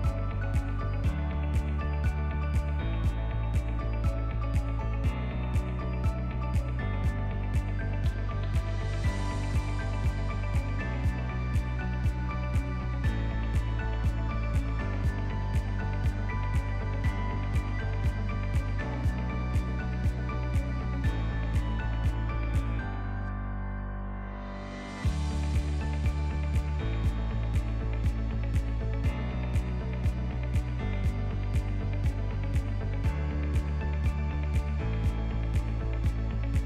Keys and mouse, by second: 0.8 shift+middle click, 1.1-1.5 ctrl+middle drag, 1.8 click, 2.1 g, 4.1 Tab, 5.2 alt+z, 5.9 click, 6.8 g, 8.7 Tab, 9.1 alt+z, 9.4-10.0 middle drag, 10.1 ctrl+middle click, 10.5 click, 10.8 click, 11.6 click, 12.6-15.3 drag, 16.0 ctrl+a, 17.3 shift+click, 18.2-19.2 shift+drag, 20.0 click, 20.8-21.4 drag, 21.8 ctrl+2, 23.0-24.2 right drag, 24.7 click, 25.2 click, 25.6 g, 28.0 KP_7, 29.0 r, 30.8 r, 32.8 g, 34.4 r, 35.5 KP_1, 36.2-36.6 ctrl+middle drag.